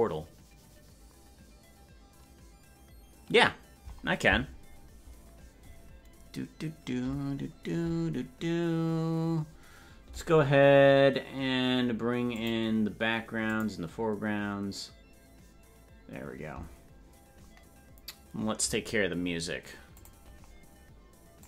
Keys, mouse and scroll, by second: 13.0 click, 15.5 click.